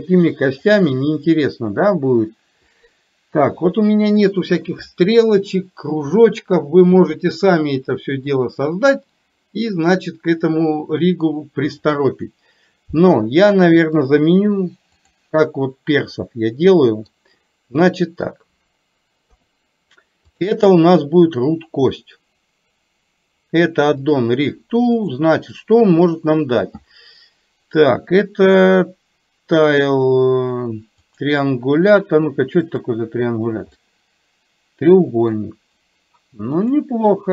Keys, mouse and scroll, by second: 0.7 click, 14.1-15.2 drag, 16.2-17.2 middle drag, 17.9 middle click, 19.4 KP_3, 20.4 click, 24.1 click, 25.1-31.4 drag, 32.9 click, 33.9-35.5 middle drag, 36.6-37.3 drag.